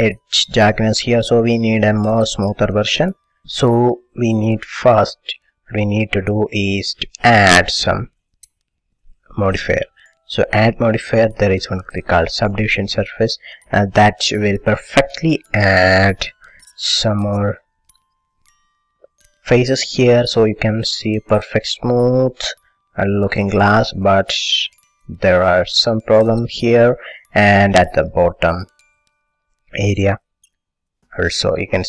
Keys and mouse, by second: 3.4-9.6 middle drag, 9.6-12.5 drag, 15.8-24.3 middle drag, 24.4-26.8 middle drag.